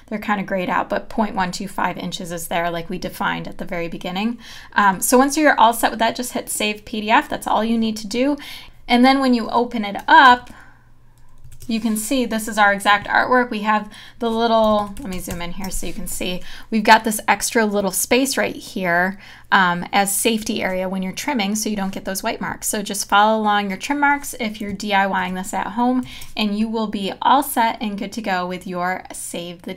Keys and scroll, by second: 10.5 super+0, 11.4 super+-, 14.9 super+=, 25.2 super+0, 26.1 super+-.